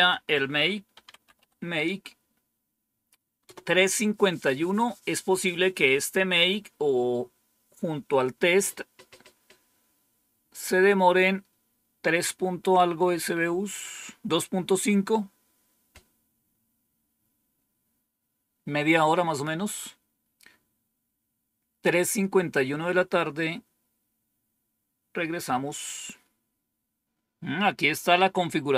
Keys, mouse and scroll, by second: 0.6-1.8 typing, 3.3 Return, 26.4-27.0 scroll down 2.